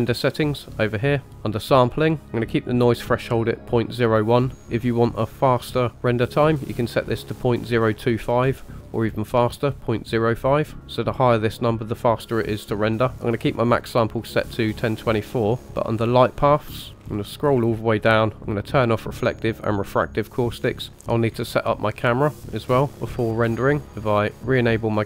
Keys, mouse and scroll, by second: 0.0 click, 1.3 click, 2.0-3.9 scroll down 1, 3.9-4.7 scroll down 2, 15.6-16.7 scroll down 2, 16.7 click, 17.0-18.6 scroll down 4, 18.7 click, 19.6 click, 20.5-20.9 scroll up 2, 20.9-21.3 scroll down 1, 21.3-23.8 scroll down 1, 23.8 scroll up 1, 24.5-25.0 drag.